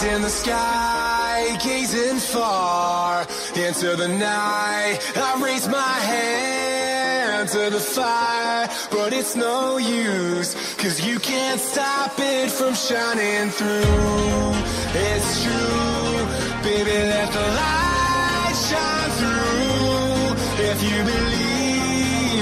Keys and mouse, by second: 1.5 KP_1, 2.8 KP_0, 2.8 KP_Decimal, 2.8 KP_1, 2.8 Return, 4.7 Return, 6.5 click, 10.9 click, 14.8 Tab, 14.8 click, 14.8-17.4 typing, 15.3 Tab, 15.3 click, 16.2 Tab, 17.0 Tab, 17.4 click, 18.2 click, 19.3 click, 19.3 u, 20.4 click.